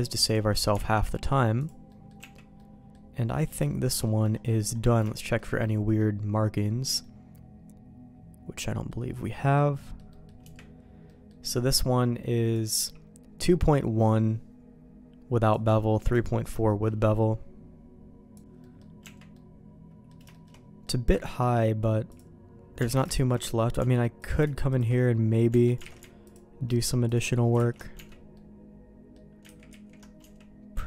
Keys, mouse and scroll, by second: 0.3 click, 0.5 middle click, 0.9 alt+x, 1.6 click, 1.9 middle click, 2.2 Tab, 2.5 middle click, 3.7 shift+middle click, 4.0 middle click, 5.1 shift+middle click, 5.6 middle click, 7.0-8.9 middle drag, 9.5 middle click, 10.2 middle click, 10.4 Tab, 11.0 middle click, 12.5 click, 15.5 click, 16.1 middle click, 16.7 middle click, 18.6 middle click, 19.0 Tab, 19.3 middle click, 20.3 shift+middle click, 20.9 middle click, 22.8 alt+a, 23.1 shift+middle click, 24.2 alt+click, 24.7 alt+shift+click, 25.5 Tab, 25.8 alt+a, 27.1 alt+shift+click, 27.7 ctrl+x, 27.9 Tab, 28.3 middle click, 29.7 ctrl+z, 30.2 Tab, 30.7 Tab.